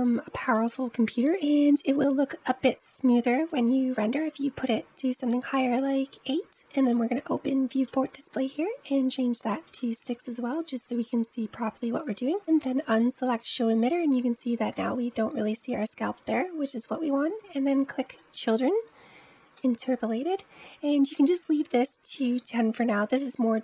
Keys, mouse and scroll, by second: 6.6-7.6 drag, 7.6-8.9 scroll down 4, 8.9-11.8 drag, 12.0-12.3 scroll down 1, 15.9-16.6 scroll down 2, 16.6-17.9 scroll down 4, 17.9-19.6 drag.